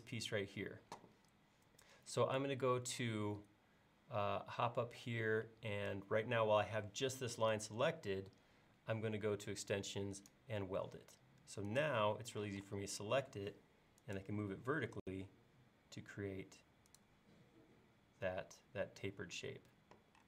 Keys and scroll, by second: 12.5 m.